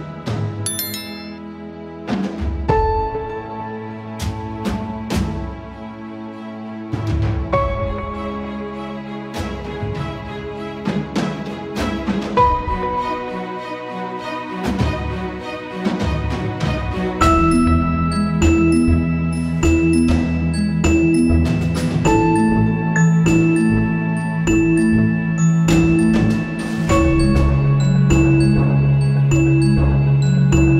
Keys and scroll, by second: 2.5 ctrl+z, 16.0 space, 16.9 space, 17.9 space, 18.8 alt+space, 25.4 space.